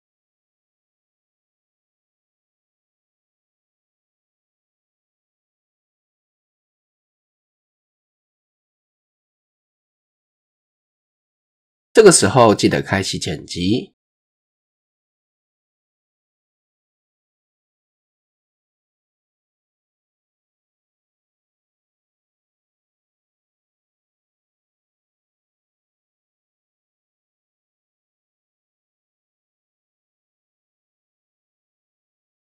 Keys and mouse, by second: 0.1-1.5 drag, 2.1-2.5 shift+drag, 2.8 click, 4.3 e, 7.0-8.2 drag, 8.4 click, 8.9-11.0 drag, 12.1 click, 13.3-14.0 drag, 14.6 shift+middle click, 15.3 click, 16.6 shift+drag, 17.2 click, 18.3 shift+drag, 18.8 e, 21.0 shift+click, 21.4 e, 25.0 shift+click, 26.5 shift+drag, 27.9 click, 29.0 s, 30.9 ctrl+r.